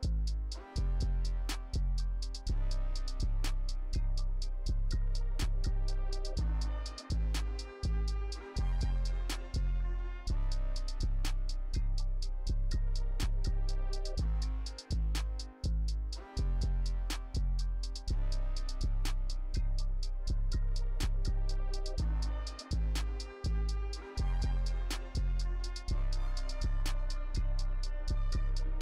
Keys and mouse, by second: 0.2 click, 0.7 Right, 1.5 click, 2.0-5.0 typing, 2.1 click, 4.3 click, 5.1 ctrl+s, 5.6 middle click, 6.0 middle click, 6.2 KP_1, 6.5 click, 7.3 click, 7.6 i, 8.0 click, 9.0 click, 10.0 click, 11.5 click, 11.9 i, 12.7 Right, 13.7 click, 14.6 click, 15.7-16.7 drag, 16.8 click, 17.5 i, 17.7 click, 17.8 KP_0, 17.9 space, 18.5 space, 19.1 click, 19.7 click, 20.1 middle click, 20.4 middle click, 21.2 drag, 21.8 click, 22.0 Left, 24.2-25.2 drag, 25.2-28.7 typing, 26.6 drag, 26.7 click, 26.8 click, 27.8 shift+Left, 28.2 shift+Left, 28.4 click.